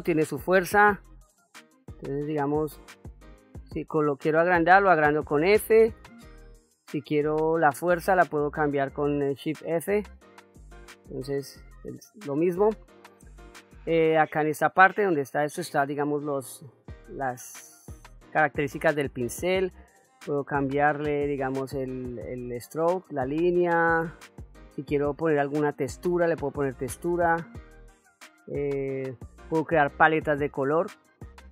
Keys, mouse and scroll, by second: 2.1 f, 14.8 click, 16.3-19.3 drag, 21.3 click, 24.9 click, 26.5 click, 27.9 click, 28.8 click, 31.1-31.5 drag.